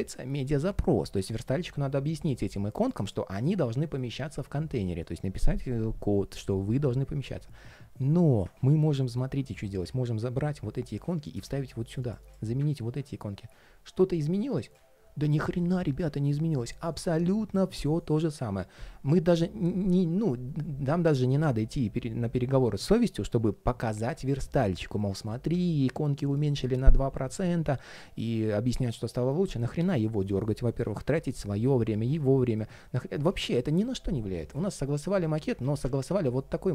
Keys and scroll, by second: 9.5 super+c, 12.5 alt+shift+super+v, 35.3 super+z.